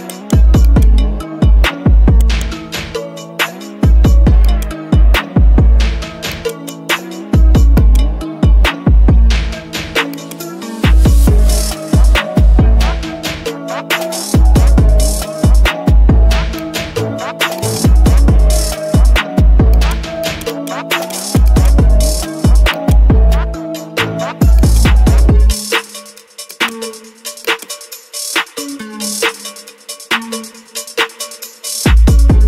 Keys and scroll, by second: 14.3 ctrl+d, 28.9 Left, 29.7 Down, 30.5 Left, 31.3 Left.